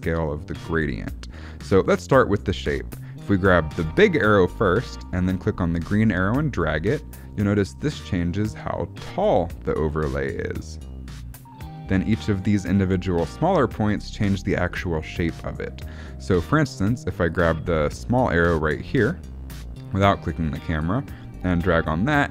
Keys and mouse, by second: 5.8-12.7 drag, 17.2 click, 17.8 click, 21.3-22.3 drag.